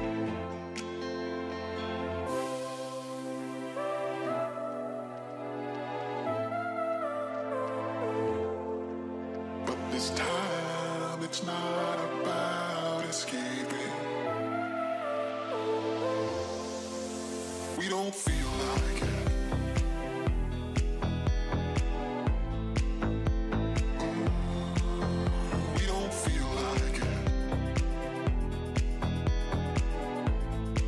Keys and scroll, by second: 2.4 ctrl+z, 12.4 ctrl+i, 18.3 ctrl+z.